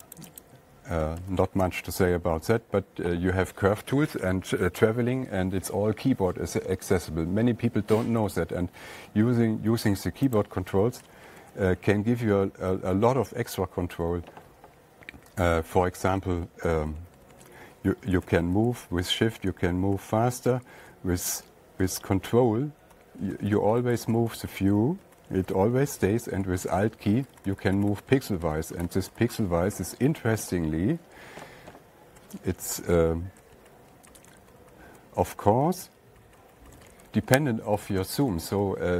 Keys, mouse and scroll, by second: 0.0 click, 0.6 click, 0.8 click, 1.6 alt+Tab, 8.6 alt+Tab, 10.8 click, 11.8 Page_Down, 12.2 Page_Down, 12.7 Page_Down, 13.9 Tab, 18.7 Down, 18.9 Down, 19.1 Up, 19.4 Up, 20.3 Left, 20.5 Left, 21.0 Right, 21.2 Right, 22.7 Right, 23.3 ctrl+Left, 23.7 ctrl+Right, 23.9 ctrl+Left, 24.5 ctrl+Right, 24.7 ctrl+Left, 25.5 ctrl+Left, 25.7 ctrl+Right, 26.9 alt+Right, 27.1 alt+Right, 27.3 alt+Right, 27.6 alt+Left, 27.8 alt+Left, 28.0 alt+Left, 28.1 alt+Left, 28.3 alt+Left, 28.4 alt+Left, 28.5 alt+Right, 28.7 alt+Right, 28.9 alt+Right, 29.1 alt+Right, 29.5 alt+Left, 29.7 alt+Left, 31.4 ctrl+scroll up 1, 31.5-32.3 ctrl+scroll, 34.0 ctrl+Right, 34.3 ctrl+scroll up 10, 34.4 ctrl+Right, 34.6 ctrl+Up, 34.8 ctrl+Up, 35.0 ctrl+Up, 35.3 ctrl+Up, 35.9 ctrl+scroll up 10, 36.3 alt+Right, 36.8 alt+Right, 36.9 alt+Right, 37.1 alt+Right, 37.2 alt+Right, 37.4 alt+Up, 37.6 alt+Up, 37.7 alt+Up, 38.2 alt+Down, 38.3 alt+Up, 38.3 alt+Down, 38.6 alt+Down, 38.8 alt+Down.